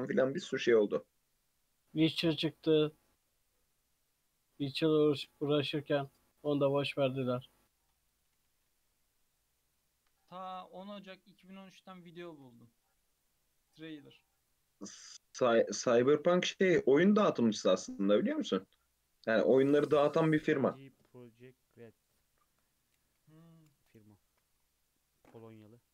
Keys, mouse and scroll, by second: 0.1 click, 0.6 g, 2.1 alt+z, 2.3 click, 2.8 g, 7.7 click, 8.2 g, 10.4-11.3 shift+middle drag, 11.3 click, 12.3 ctrl+r, 15.8 Tab, 16.0 alt+z, 16.1-17.0 alt+scroll down 4, 17.0 shift+middle click, 17.6 scroll down 2, 17.9-21.0 middle drag.